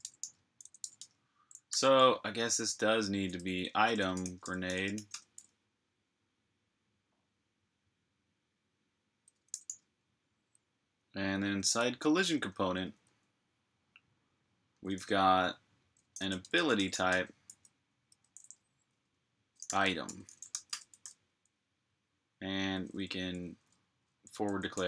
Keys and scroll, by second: 0.2-1.2 typing, 1.5 super+j, 2.9-5.3 typing, 9.3 g, 11.3 j, 12.6 typing, 14.3-17.4 typing, 19.2-24.8 typing, 20.5 Return.